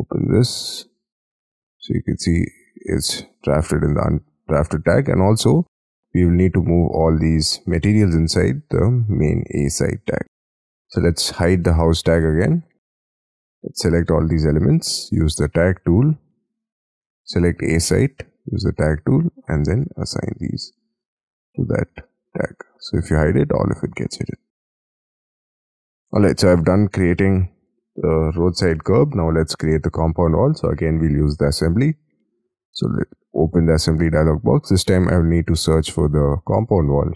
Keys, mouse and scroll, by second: 6.9 middle click, 12.2-14.1 scroll down 6, 17.6-20.5 scroll up 1, 20.5-21.0 scroll up 9, 23.8 middle click, 24.2 space, 24.3 scroll down 5, 24.9-25.7 scroll up 12, 25.7-26.2 scroll down 7, 26.2-27.2 scroll up 17, 27.2 middle click, 29.3 scroll down 6.